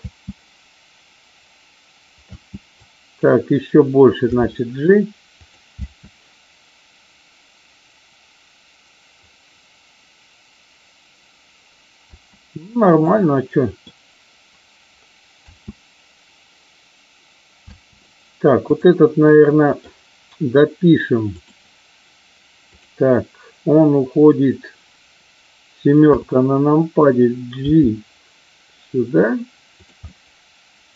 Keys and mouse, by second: 2.2 space, 2.7-3.2 drag, 4.2 g, 5.3 click, 5.7 space, 11.9 space, 12.9-13.8 middle drag, 15.3 space, 17.6 space, 19.2 middle click, 21.4 click, 22.7 click, 25.9 KP_7, 27.6 g, 29.7 click, 29.9-30.9 middle drag.